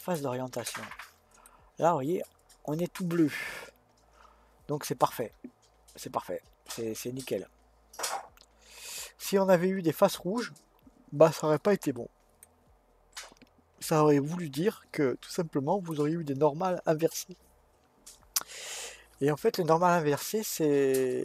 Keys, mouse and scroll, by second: 1.4-4.4 middle drag, 12.5-13.2 scroll down 1, 13.2-16.2 middle drag.